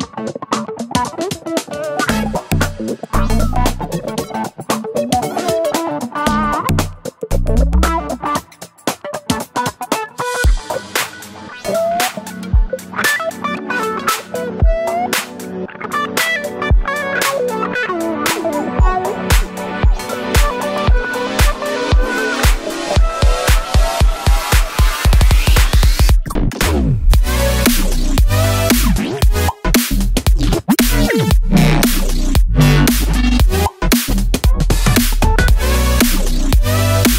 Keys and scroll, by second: 6.7 super+d, 8.2 super+d, 10.2 super+d, 18.7 super+c, 29.0 5, 29.1 Return, 31.4 super+c, 31.6 super+v.